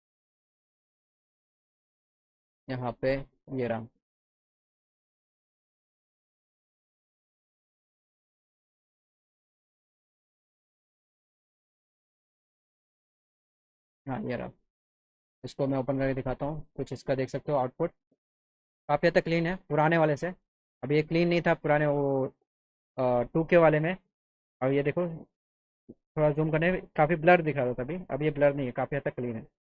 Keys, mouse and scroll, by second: 1.8 click, 3.8 click, 5.3 click, 14.0 right click, 16.8 click, 18.7 middle click, 22.1 middle click.